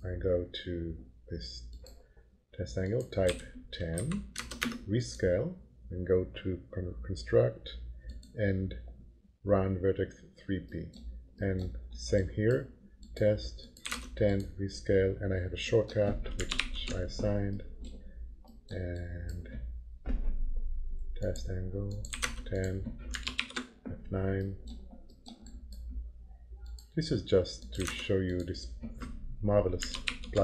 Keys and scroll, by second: 3.3 1, 4.0 Delete, 4.4 0, 4.6 Return, 13.6-14.5 typing, 16.6 ctrl+shift+9, 21.8-22.7 typing, 23.4 ctrl+shift+9, 27.5-28.4 typing, 30.0 ctrl+shift+9.